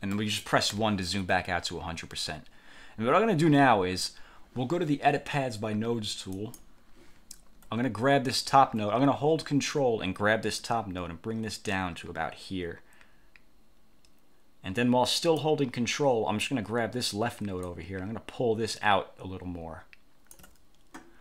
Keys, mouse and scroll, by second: 0.2 click, 0.8 1, 6.4 click, 10.7-15.7 ctrl+drag, 17.8-20.6 ctrl+drag.